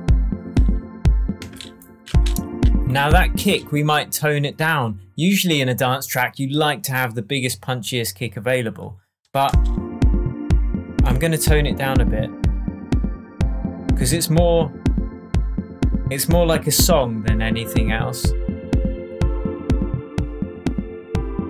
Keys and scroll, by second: 1.3 space, 3.3 space, 9.4 space.